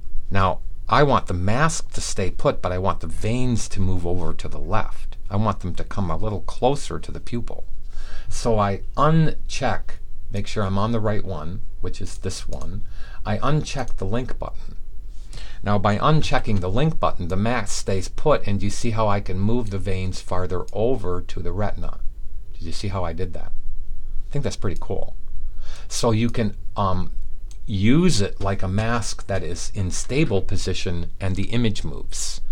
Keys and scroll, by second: 16.1 v.